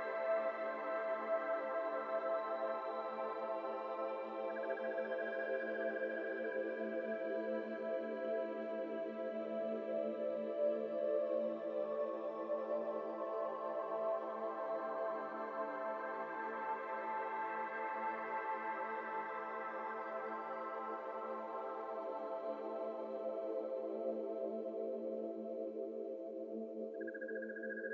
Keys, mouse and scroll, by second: 15.8 n, 16.5 shift+middle drag, 16.7 scroll up 1, 16.9 click, 17.1 Tab, 17.4 shift+middle click, 17.5-17.9 scroll up 2, 17.9 ctrl+b, 19.9-20.6 scroll up 2, 20.6 1, 21.0 click, 23.4 shift+click, 24.1 s, 26.0 click, 26.6 2, 26.9 click, 27.4 shift+click, 27.8 s.